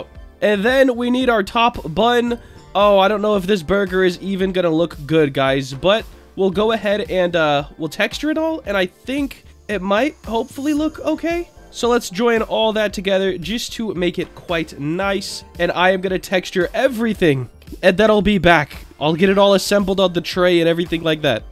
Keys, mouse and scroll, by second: 0.2-0.6 scroll down 2, 0.6 middle drag, 0.9-1.3 scroll down 1, 1.3-1.7 middle drag, 2.2 click, 3.0-4.3 drag, 4.6-5.3 scroll up 2, 5.0-5.9 middle drag, 5.9 scroll up 1, 6.4-9.0 middle drag, 9.2 middle drag, 9.5-10.5 scroll down 3, 10.5-10.8 middle drag, 11.2-11.6 drag, 11.9 ctrl+j, 12.2-12.6 scroll down 3, 12.7-13.5 middle drag, 13.6 scroll up 1, 13.7-14.1 middle drag, 14.9-15.5 drag, 15.7-16.2 middle drag, 16.4-16.9 shift+middle drag, 18.0-18.7 shift+middle drag, 18.7-19.4 scroll up 1, 19.4 click.